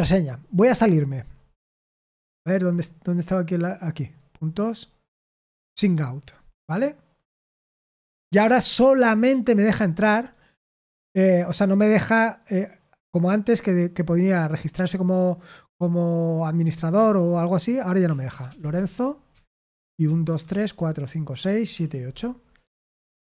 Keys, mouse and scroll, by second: 6.2 click, 19.3 Tab, 19.3-22.2 typing.